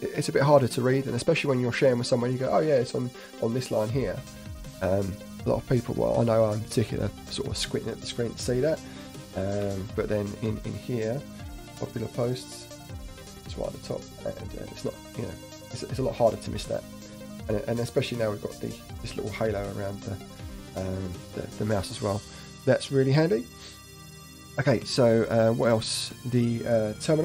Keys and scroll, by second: 9.6 alt+Tab, 24.9 alt+Tab, 25.7 alt+Right, 25.8 alt+Right.